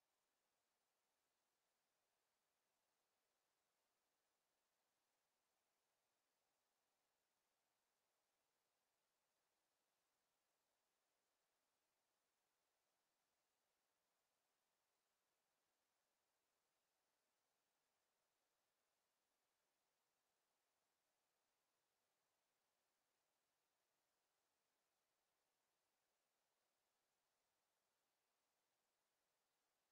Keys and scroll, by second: 18.1 w, 26.9 d, 27.6 w, 28.7 d.